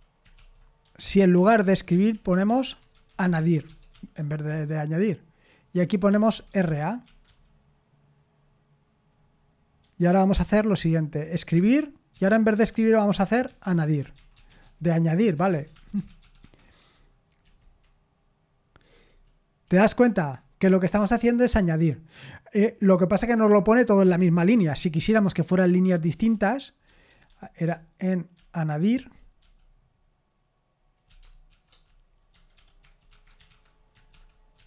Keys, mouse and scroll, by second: 0.0-3.7 typing, 3.9 Escape, 4.9-7.5 typing, 9.8-16.7 typing, 17.4 F5, 19.1 F5, 19.6 F5, 20.0 F5, 24.0 Escape, 25.0-29.9 typing, 31.1-34.6 typing, 33.5 Escape.